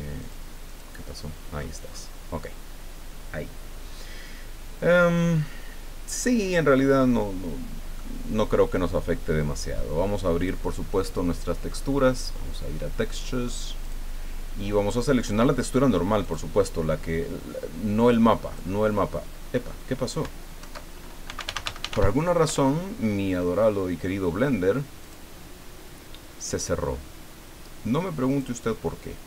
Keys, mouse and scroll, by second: 0.2 click, 0.6 click, 1.5-2.1 scroll up 4, 6.4-6.8 scroll down 2, 7.9 click, 10.4 click, 12.1 click, 13.8 click, 15.3-15.7 scroll down 2, 16.2 click, 16.6-16.9 scroll down 1, 18.1 click, 20.6 alt+F2, 21.0-22.4 typing, 22.4 Return, 25.0 click, 28.3 click.